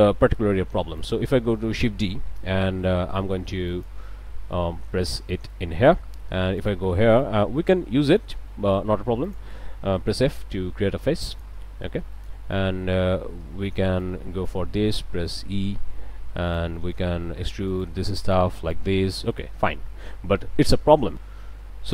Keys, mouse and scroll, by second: 0.1 click, 0.4 a, 1.0 click, 1.4 click, 2.7 shift+d, 3.7 click, 4.1-5.9 drag, 6.6 ctrl+click, 7.1-7.4 ctrl+scroll up 1, 8.3 ctrl+a, 9.2 click, 10.1 f, 11.3 click, 11.7 a, 12.1 click, 13.1 alt+a, 13.9 ctrl+alt+a, 14.0 ctrl+alt+click, 14.4 ctrl+right click, 15.7 e, 16.5 click, 16.8 middle click, 17.7 ctrl+right click, 18.2 ctrl+right click, 18.6 ctrl+right click, 19.1 ctrl+middle click, 19.7-20.9 drag, 21.1 click.